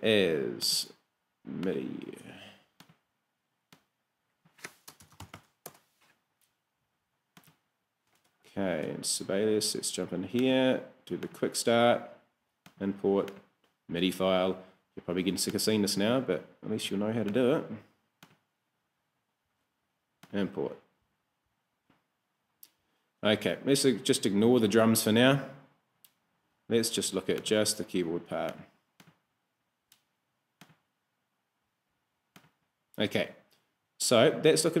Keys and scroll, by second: 4.9 space, 5.4 s, 5.7 Return, 8.8 super+Tab.